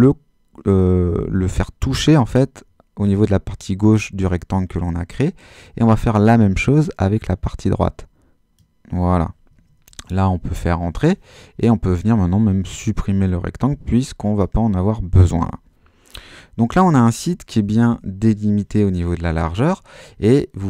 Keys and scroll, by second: 9.9 Return, 17.6 super+-.